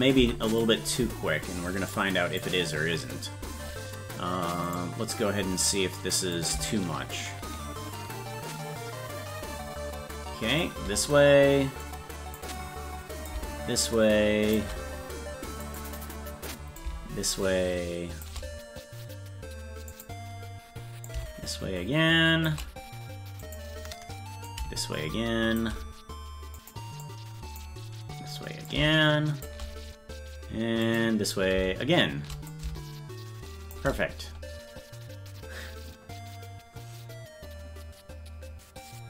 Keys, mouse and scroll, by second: 0.2 i, 2.0 click, 4.7 right click, 6.4-10.7 drag, 11.9 click, 13.3-14.6 drag, 15.7 click, 16.8-18.3 drag, 20.0 click, 21.1-22.5 drag, 23.5 click, 24.5-25.6 drag, 26.6 click, 27.1 click, 28.7 click, 30.9 click, 32.5-33.8 drag.